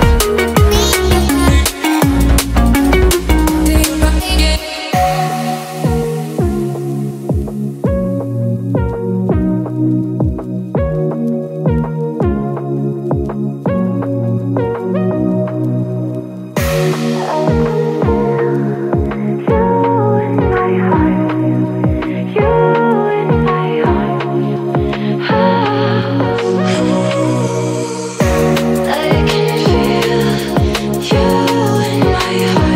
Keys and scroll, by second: 5.8 shift+w, 6.0 e, 6.8 BackSpace, 8.1 w, 8.9 e.